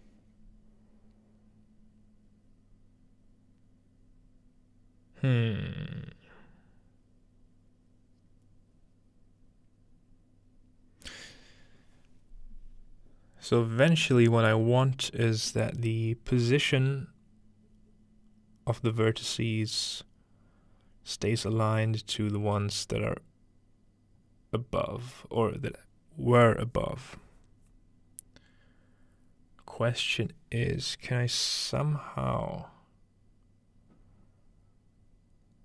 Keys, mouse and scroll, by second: 13.4-14.4 scroll down 2, 14.0 middle click, 14.2-15.5 middle drag, 14.4 scroll up 1, 15.4-17.0 scroll up 1, 15.9-35.6 middle drag.